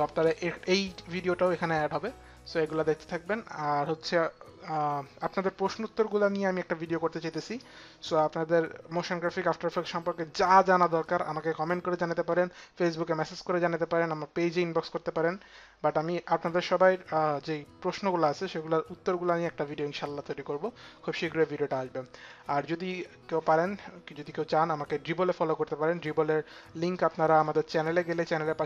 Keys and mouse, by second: 22.5 click, 27.0 click.